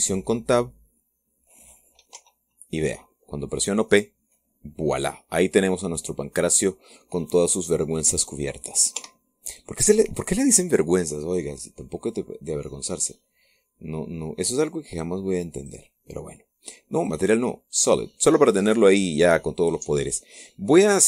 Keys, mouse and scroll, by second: 0.5 Tab, 2.9 p, 9.7 Escape, 11.9 click, 16.3 click, 17.7 click, 18.5 click.